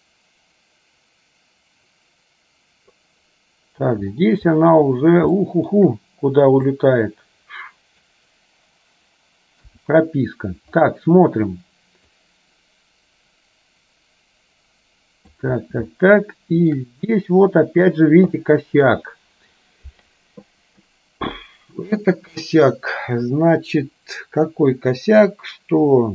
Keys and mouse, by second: 5.4 shift+middle click, 6.9-8.2 drag, 12.3-15.7 drag, 16.1 shift+middle click, 18.4 shift+middle click.